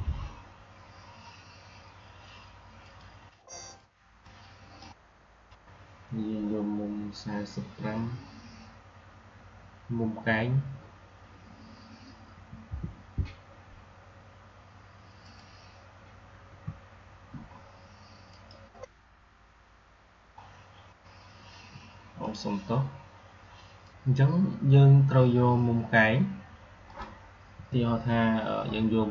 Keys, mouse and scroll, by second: 4.4-4.8 drag, 15.1 click, 18.2 click, 20.4-20.8 scroll down 1, 22.1 click, 26.8 click, 27.4 \.